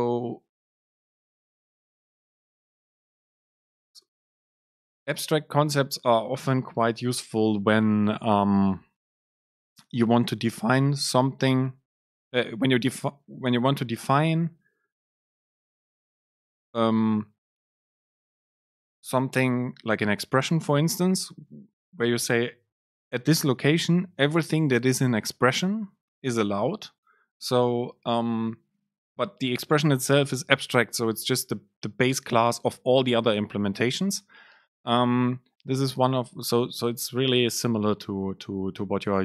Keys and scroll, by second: 7.8 BackSpace.